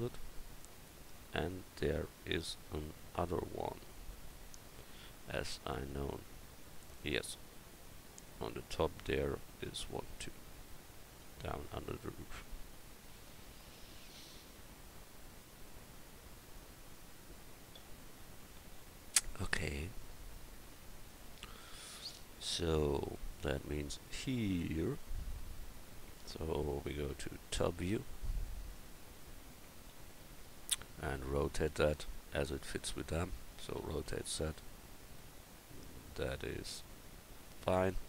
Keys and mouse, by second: 1.4 click, 27.5 KP_7, 29.9 KP_7, 33.8 r.